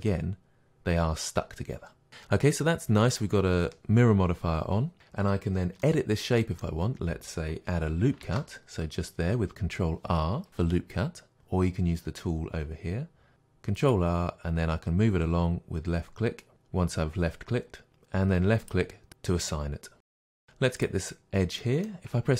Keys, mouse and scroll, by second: 2.1 click, 5.8-18.7 middle drag, 8.2 ctrl+r, 18.7 click, 20.2-20.8 middle drag, 20.8-21.6 drag, 21.6-22.3 middle drag.